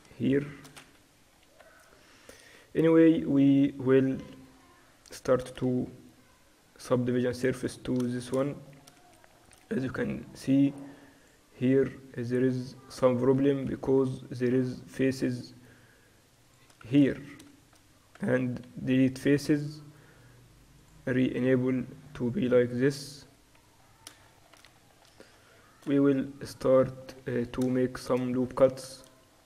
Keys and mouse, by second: 3.0-5.2 middle drag, 5.2-6.9 right drag, 6.9 ctrl+2, 9.2 middle click, 10.2-11.3 middle drag, 10.5-13.5 drag, 11.3-13.5 right drag, 13.5 Tab, 13.7 z, 15.5-19.3 drag, 16.9 z, 17.3-19.3 right drag, 18.2 x, 20.9-22.6 drag, 21.7 Tab, 22.1-24.4 middle drag, 26.0 Tab, 26.8 Tab.